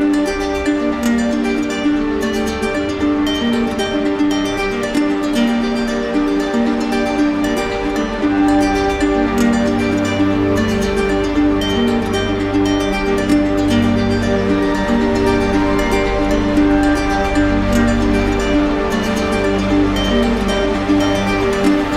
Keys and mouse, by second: 8.9 z, 10.0 click, 11.7 click, 14.0 click, 14.5 click, 16.5 alt+click, 17.8-18.7 typing, 21.0 click, 21.6-21.9 typing.